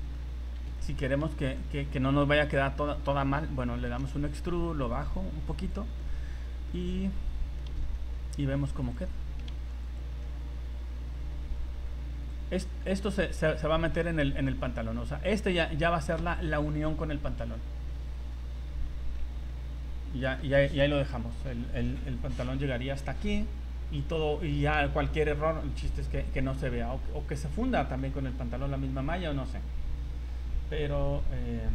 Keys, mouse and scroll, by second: 0.3 scroll up 2, 0.8 shift+middle click, 1.0 shift+middle click, 1.6 middle click, 3.9 e, 4.9 click, 6.0 middle click, 7.4 s, 9.2 s, 10.2 middle click, 12.3 click, 13.1 middle click, 13.8 s, 14.7 middle click, 15.8 middle click, 17.4 scroll down 3, 17.8 middle click, 19.2 Tab, 19.5 middle click, 21.2-21.5 scroll up 3, 21.5 middle click, 22.2 scroll up 2, 22.5 Tab, 24.1 middle click, 27.4 middle click, 27.6 scroll down 3, 28.0 middle click, 28.5 scroll down 2, 29.5 scroll down 4, 29.9 scroll up 2, 30.6 scroll up 2.